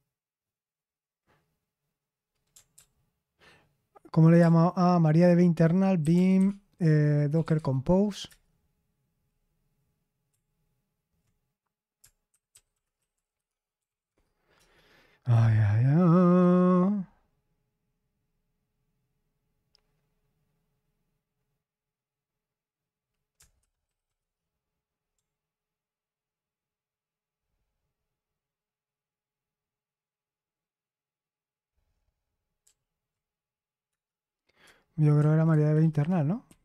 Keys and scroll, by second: 2.7 ctrl+p, 4.3 ctrl+BackSpace, 5.0-7.9 typing, 8.2 Return, 12.0-14.3 typing, 14.5 Return, 23.3-24.5 typing, 32.6 ctrl+p, 33.8 Return, 34.9-36.6 typing.